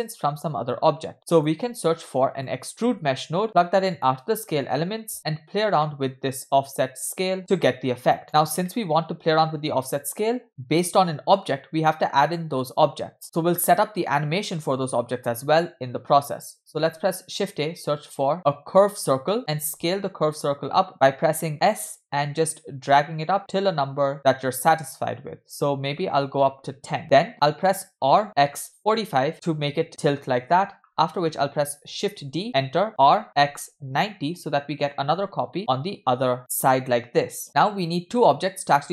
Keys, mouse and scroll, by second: 0.7-1.1 scroll up 1, 1.1 click, 2.1 shift+a, 4.7 click, 4.9 click, 5.9 middle click, 7.2-8.2 drag, 8.4 scroll down 2, 8.7 middle click, 10.0 click, 12.4 middle drag, 13.2 middle click, 13.2-13.6 scroll down 1, 16.8 shift+a, 19.6 s, 28.1 r, 32.0 shift+d, 33.0 r, 35.6 middle click, 36.9-37.5 middle drag.